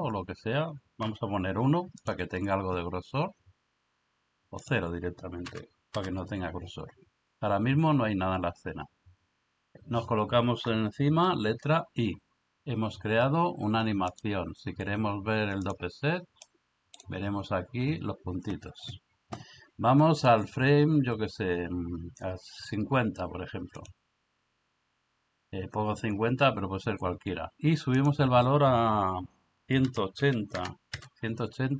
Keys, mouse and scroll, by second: 4.7-6.0 drag, 11.6 i, 14.3-15.7 drag, 16.5 middle click, 23.8 click, 28.0 click.